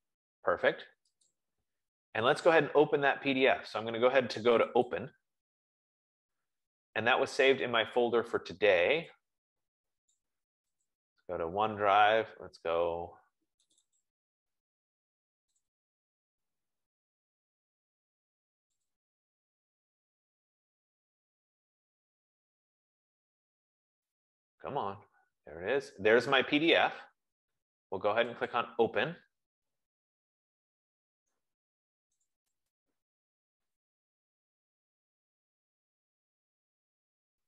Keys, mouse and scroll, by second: 0.2 F15, 1.7 click, 5.3 click, 10.4 click, 11.2 click, 14.1 click, 14.3 click, 15.9 click, 16.3 click, 17.4 middle click, 19.2 click, 19.5 click, 24.9 click, 28.8 click, 30.4 click, 32.6 click, 32.9 click.